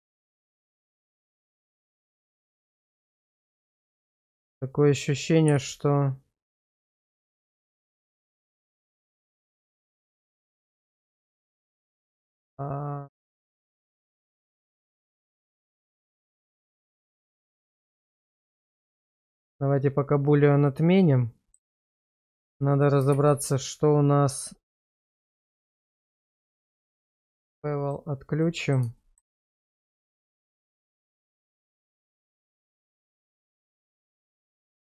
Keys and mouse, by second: 0.2 shift+middle click, 0.9 Tab, 2.7 middle click, 3.6 Tab, 5.5 g, 15.2 click, 15.7 click, 16.3 click, 16.8 click, 17.4 click, 18.9 click, 20.3-21.6 middle drag, 22.1 shift+middle drag, 23.2 shift+z, 25.2 shift+z, 25.8 middle click, 27.9 click, 28.4 middle click, 29.0 shift+middle click, 29.8 Tab, 31.3-32.4 middle drag, 33.0 shift+middle click, 33.6 Tab, 33.9 middle click, 34.5 q.